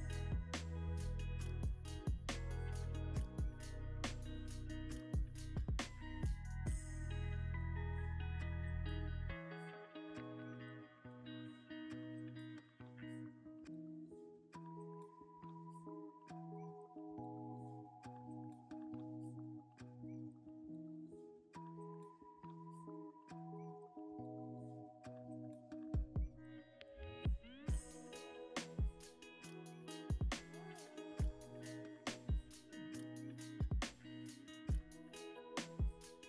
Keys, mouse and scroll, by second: 4.1 double click, 21.3 double click, 21.7 Tab, 21.8 1, 22.3 a, 23.0 e, 28.0 ctrl+c, 28.0 typing, 28.9 Escape, 29.8 Tab, 30.2 scroll up 1, 30.3 middle click, 31.6 Tab, 32.1 a, 32.9 e, 35.0 ctrl+v, 35.5 Return, 36.1 Escape.